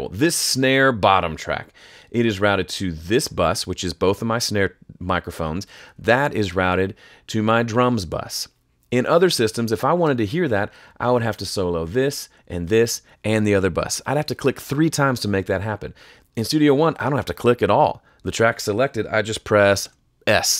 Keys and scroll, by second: 19.8 s.